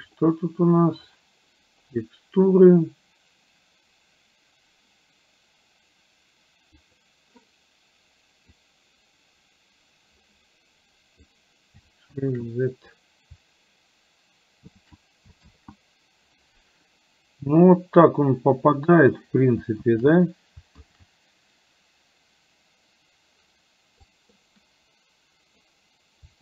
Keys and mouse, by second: 6.9 click, 8.6-11.4 drag, 12.3 shift+z, 14.8 shift+z, 15.6 shift+z, 20.0 shift+z, 20.9 shift+z, 24.1-25.8 drag.